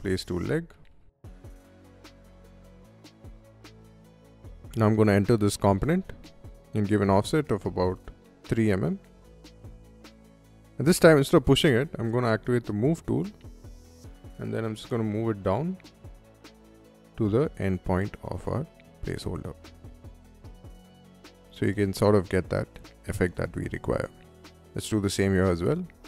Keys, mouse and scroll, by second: 0.0-2.2 typing, 2.5 middle click, 2.7-4.2 middle drag, 4.5 middle click, 4.7 click, 5.3 f, 5.8 click, 6.2 ctrl+z, 6.2 click, 8.1 3, 8.4 3, 9.0 Return, 9.5 space, 10.3 m, 10.6 n, 11.1 click, 12.0 Up, 14.1 middle click, 14.9 middle click, 18.7 click, 19.5 space, 20.1-21.8 middle drag, 21.9 middle click, 23.5 scroll down 1, 23.7 Escape, 24.2 middle click, 24.7 click, 24.9 click, 25.6 f, 25.7 click.